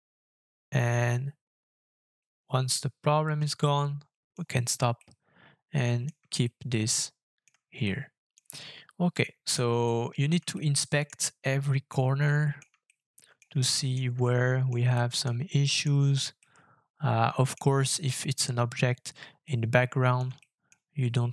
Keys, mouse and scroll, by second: 3.6 shift+middle click, 4.3-4.9 shift+scroll up 1, 5.0 shift+middle click, 6.4 middle click, 7.8 shift+middle click, 9.1 shift+scroll up 1, 9.2 shift+middle click, 9.8 middle click, 10.5 shift+middle click, 11.4 shift+middle click, 12.3 shift+middle click, 12.8 middle click, 13.6 shift+middle click, 14.2 middle click, 15.0 shift+middle click, 15.5 shift+middle click, 16.4 shift+middle click, 19.4 middle click, 20.4 shift+middle click, 21.0 shift+middle click.